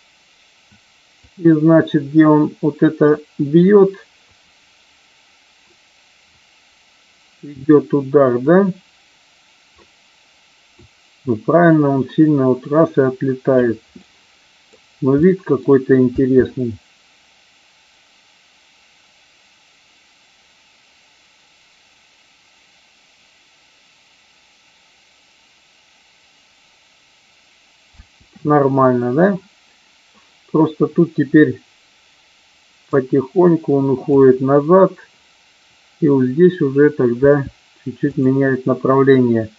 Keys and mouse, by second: 1.2-13.6 drag, 13.8-14.6 middle drag, 15.1 middle click, 16.1 space, 28.0 space, 32.8-34.1 drag, 37.2 r, 38.1 click.